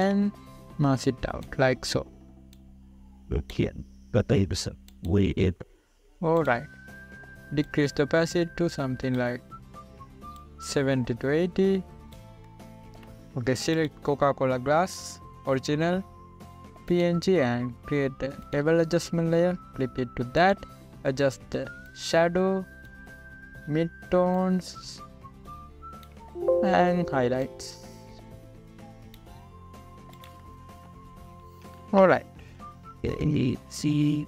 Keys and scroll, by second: 32.9 ctrl+-, 33.4 ctrl+=.